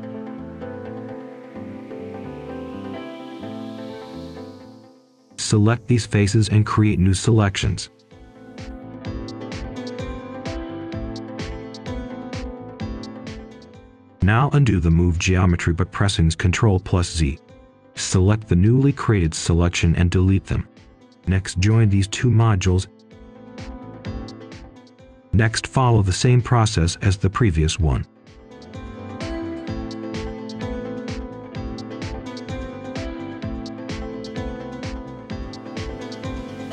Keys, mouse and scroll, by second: 0.0 ctrl+shift+click, 1.6 Escape, 2.1 scroll up 1, 2.5 ctrl+shift+click, 3.6 scroll down 1, 3.9 right click, 4.6-5.4 scroll up 1, 5.5 ctrl+shift+click, 7.9 scroll down 1, 9.4 right click, 10.8 click, 13.2 right click, 14.0 click, 16.2 click, 18.8 Delete, 19.4 click, 20.9-21.8 typing, 23.7 click, 25.2 right click, 25.7 click, 30.3-30.8 scroll down 1, 30.8 right click, 31.8-32.4 scroll up 1, 32.4 right click, 33.4-35.2 ctrl+shift+drag, 35.4 scroll up 1, 35.7 right click, 35.9-36.3 scroll down 2, 36.1 right click, 36.3 ctrl+shift+click, 36.6 scroll up 1.